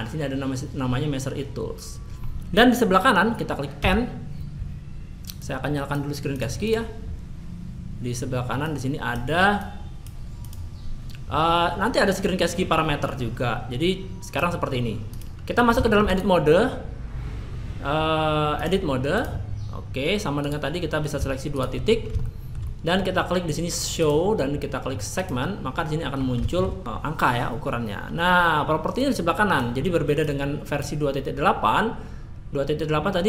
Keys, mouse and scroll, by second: 19.2-33.2 drag.